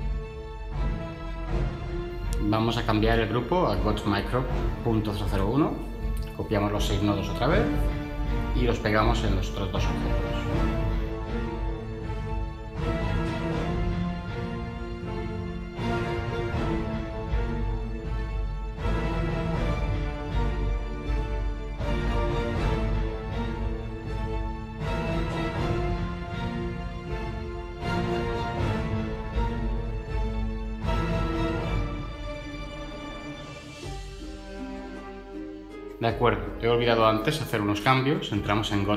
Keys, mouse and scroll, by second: 7.1 ctrl+c, 7.6 ctrl+v, 14.2 ctrl+v, 28.5 0.